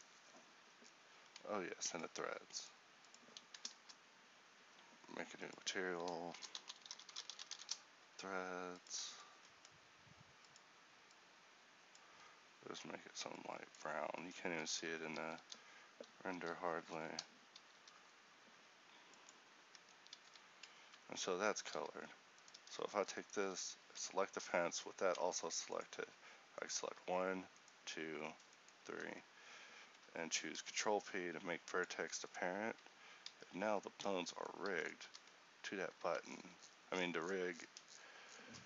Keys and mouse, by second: 14.3 Tab, 14.7 a, 16.4 l, 17.9 ctrl+i, 19.9 Tab, 20.4 a, 21.9 a, 23.9 Tab, 25.3 ctrl+t, 28.7-30.6 right drag, 30.6 ctrl+p, 32.9 Tab, 33.4 a, 35.1 r.